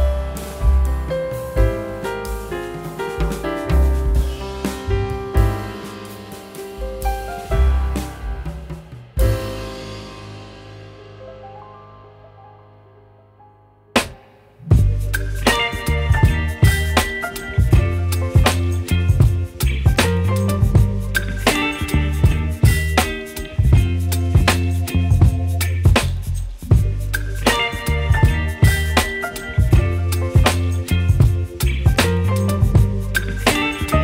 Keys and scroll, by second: 5.2 Return, 25.4 b, 33.8 space.